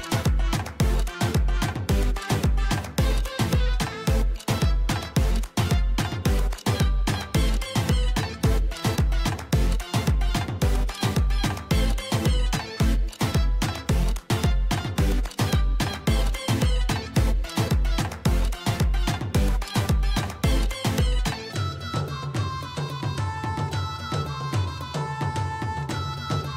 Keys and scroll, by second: 2.6 |, 7.0 \, 9.4 p, 12.9 Escape, 14.0 \, 18.7 Escape.